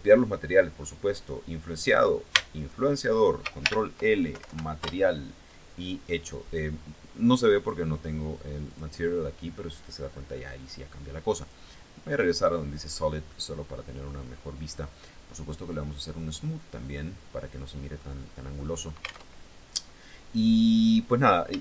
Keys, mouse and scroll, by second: 0.6 right click, 2.1 shift+right click, 3.2 ctrl+shift+l, 3.9 ctrl+Down, 4.4 ctrl+Return, 7.2 click, 8.2 click, 11.0 click, 11.8 click, 12.5 scroll down 1, 12.8 middle click, 13.8 scroll up 1, 15.7 click, 16.5-17.6 middle drag, 17.6 scroll up 1, 17.8 scroll down 1, 18.2 middle click, 18.8 alt+Tab.